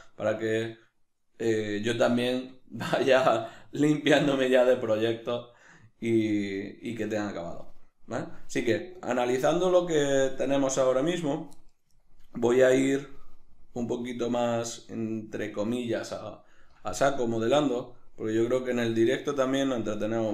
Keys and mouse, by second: 18.7 click, 19.6-20.3 ctrl+middle drag.